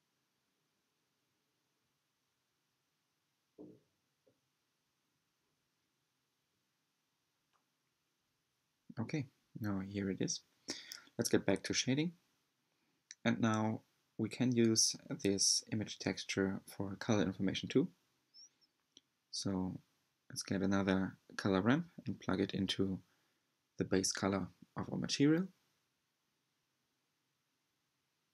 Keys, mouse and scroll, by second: 0.0 shift+middle click, 0.1 scroll down 1, 0.1 drag, 0.2 shift+middle click, 0.3 click, 0.7 shift+middle click, 0.9 click, 1.3 middle click, 1.4-1.7 drag, 1.7 shift+middle click, 1.8 drag, 1.9 z, 2.0-2.4 drag, 2.4 shift+middle click, 2.4 drag, 2.5 shift+middle click, 2.6-3.0 drag, 3.0 shift+middle click, 3.0 drag, 3.2 drag, 3.4 middle click, 3.5-3.8 drag, 3.8 middle click, 3.9 click, 4.3 shift+middle drag, 4.5 drag, 4.7 middle click, 4.8 click, 5.2 middle click, 5.3 drag, 5.4 middle click, 5.5 click, 5.6 middle click, 5.6 click, 5.8 middle click, 6.0 click, 6.0 middle click, 6.1 drag, 6.3 shift+middle drag, 6.3 click, 6.5 middle click, 6.6 drag, 6.7 middle click, 6.8 click, 6.9 middle click, 6.9 drag, 7.0 middle click, 7.1 click, 7.1 middle click, 7.2 click, 7.4 middle click, 7.5 middle click, 7.5-7.9 scroll up 4, 7.6 click, 7.7 middle click, 7.7 drag, 7.9 middle click, 7.9 middle click, 8.0 click, 8.0 middle click, 8.0 scroll down 3, 8.2 click, 8.3 middle click, 8.3 scroll up 1, 8.3 drag, 8.4 middle click, 8.5 click, 8.6 middle click, 8.6-9.1 scroll down 2, 8.6 click, 8.7 middle click, 8.7 click, 8.8 middle click, 8.8 click, 8.9 middle click, 8.9 click, 9.0 middle click, 9.1 click, 9.1 middle click, 9.1 click, 9.2 middle click, 9.2 click, 9.3 middle click, 9.4 scroll up 1, 9.4 click, 9.5 middle click, 9.5 scroll down 5, 9.6 Tab, 9.6 middle click, 9.7 r, 9.7 click, 10.7-12.6 scroll down 8, 11.1-16.2 middle drag, 16.3 middle drag, 16.7 middle click, 20.1-23.1 middle drag, 23.1-28.3 drag.